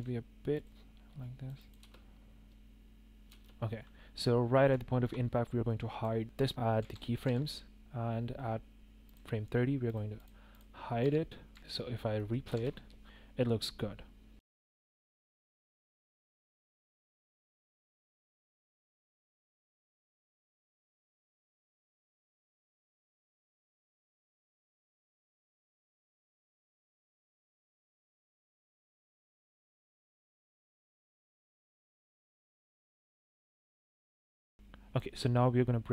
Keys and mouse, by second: 1.2 click, 1.6 click, 1.8 space, 3.3 space, 3.4-3.8 drag, 4.9 shift+click, 5.6 click, 6.8 i, 7.2 i, 10.1 click, 10.5 click, 11.0 i, 11.5 i, 11.6 space, 11.6 space, 14.3 space, 14.7 space, 15.2 click, 15.5 shift+a, 16.2 click, 16.3 click, 16.6 click, 16.9 click, 17.2 KP_0, 18.1 click, 18.8 click, 18.9-20.0 typing, 20.8 click, 21.2 KP_0, 22.4 shift+click, 23.1 shift+click, 23.4 middle drag, 24.8 click, 25.6 click, 25.7 KP_0, 26.0 KP_0, 26.7 g, 26.7 z, 27.8 g, 27.8 z, 28.1 click, 29.1 g, 29.8 click, 30.4 click, 30.7 click, 31.1 click, 31.6 click, 32.0-32.9 drag, 33.1 space, 33.3 space, 33.4 click, 33.5 space, 34.4 space, 34.5-34.9 drag.